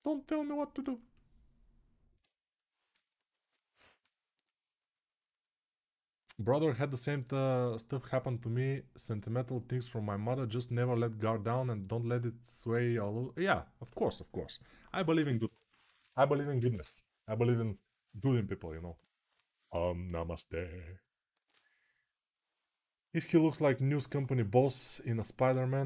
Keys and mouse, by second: 1.9-25.8 alt+shift+right drag.